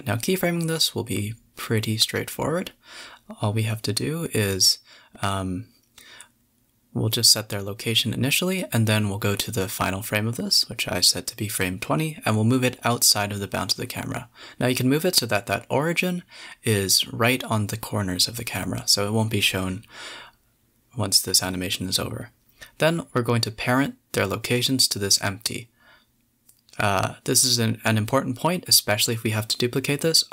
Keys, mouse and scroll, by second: 0.3 shift+click, 1.0 KP_0, 3.4 middle drag, 3.6 shift+a, 5.2 click, 5.8 shift+click, 7.5 click, 8.2 KP_7, 8.8 click, 9.2 KP_0, 9.9 g, 11.5 g, 13.2 click, 13.3 g, 14.0 g, 15.0 shift+click, 16.6-16.9 scroll down 4, 17.4-19.4 drag, 19.8 middle drag, 20.0 scroll up 5, 20.2 shift+a, 21.6-22.0 middle drag, 22.0-23.2 scroll down 4, 22.2 middle click, 23.2 click, 23.4 shift+click, 23.8 shift+click, 24.3 shift+click, 25.0 ctrl+j, 26.0 ctrl+p, 27.9-28.3 middle drag, 28.3 click, 28.6 g, 29.0 click, 29.3 g.